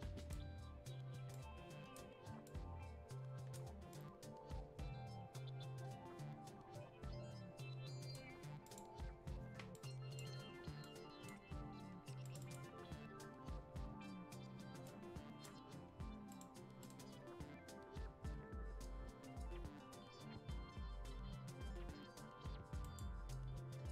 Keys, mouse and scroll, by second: 1.3-8.6 drag, 9.8 click, 10.8-12.2 drag, 12.2 click, 14.8-16.3 drag, 16.3 right click, 22.8 click.